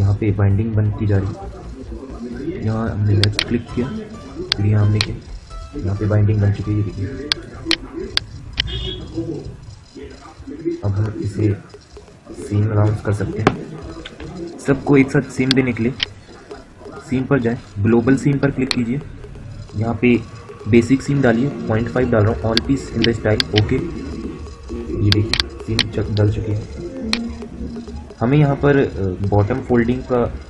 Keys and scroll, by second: 13.8 F9, 20.5-21.4 typing.